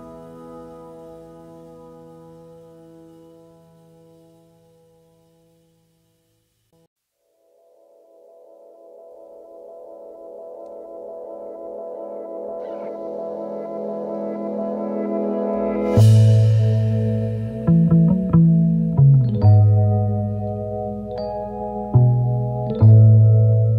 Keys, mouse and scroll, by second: 1.2 alt+scroll up 1, 1.4 space, 2.1 double click, 3.7 alt+Right, 4.6 alt+Right, 5.4 alt+Left, 6.8 ctrl+a, 7.1 ctrl+scroll down 1, 11.2 shift+click, 12.6 alt+scroll down 1, 12.9 space, 14.6 Down, 15.0 Down, 19.7 alt+scroll down 3, 20.1-20.7 space, 21.6 space, 22.0 space, 22.5 alt+scroll up 1, 22.7 space.